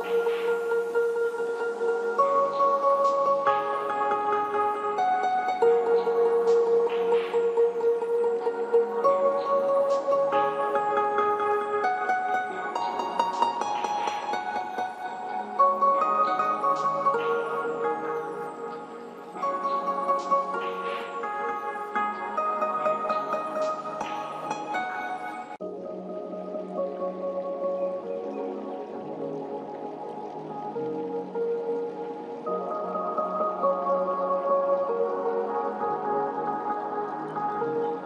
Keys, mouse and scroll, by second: 1.9 g, 2.3-5.0 drag, 15.4 typing, 20.4 ctrl+shift+Num_Lock, 20.4 click, 21.0 ctrl+shift+q, 21.1 click, 21.2 g, 21.6-25.6 drag, 29.6 click.